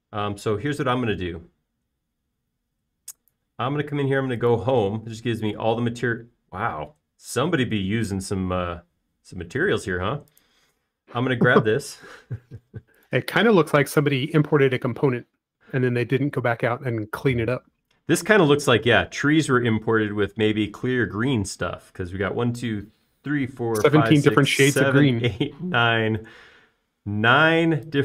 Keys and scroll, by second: 14.0 space.